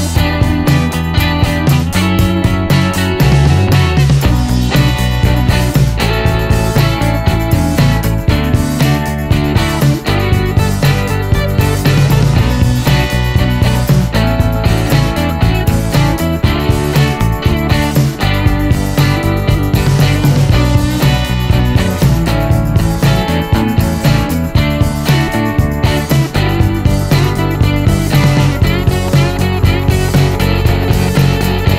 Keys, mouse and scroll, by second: 0.0 shift+9, 0.5 shift+Return, 1.4 scroll down 1, 1.6 middle click, 2.4 scroll up 1, 2.6-3.8 middle drag, 4.4 scroll down 1, 4.6-7.6 middle drag, 8.5 middle click, 9.0 scroll up 1, 9.3-10.0 middle drag, 11.0 click, 12.1 click, 12.8 click, 13.6 click, 14.0 right click, 14.5-15.9 drag, 16.4 t, 19.2 click, 21.1 c, 22.1 middle click, 24.5 l, 26.4 click, 27.4 click, 27.9 right click, 28.7 click, 31.3 click.